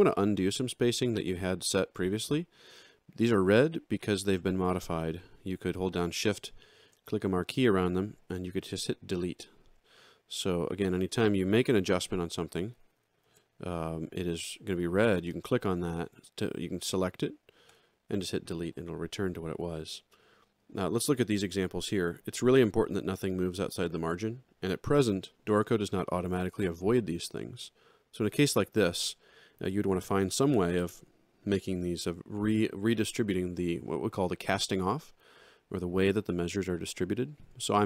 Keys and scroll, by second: 7.9 Delete, 11.8 alt+Down, 12.7 ctrl+alt+Down, 17.7 Delete.